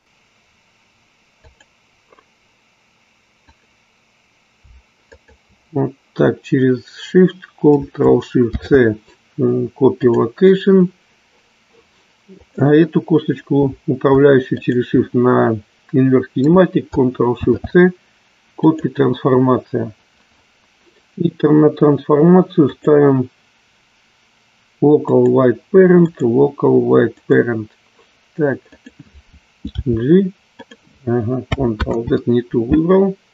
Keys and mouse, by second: 1.4 click, 3.5-4.5 drag, 5.1-6.2 shift+drag, 12.4-13.9 drag, 14.5-15.7 shift+drag, 22.6-25.4 drag, 26.0-27.4 drag, 28.6-29.7 drag, 29.7 g, 31.9 ctrl+z.